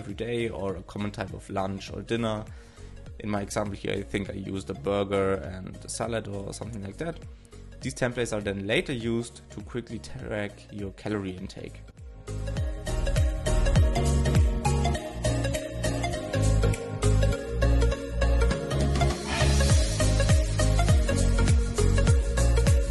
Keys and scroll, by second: 0.0 shift+s, 4.8 shift+f, 5.1 shift+9, 5.7 alt+], 8.3 shift+f, 8.7 shift+m, 9.3 super+s, 9.8 super+c, 10.1 alt+{, 14.1 shift+t, 14.3 alt+shift+Left, 14.4 shift+Right.